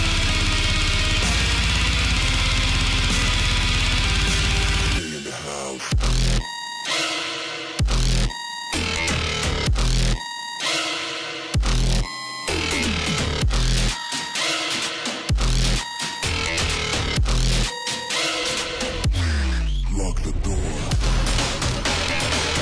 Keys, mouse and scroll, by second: 1.1-2.1 scroll down 1, 2.1-4.6 drag, 4.6-5.2 scroll down 1, 5.2 click, 5.3-15.5 drag.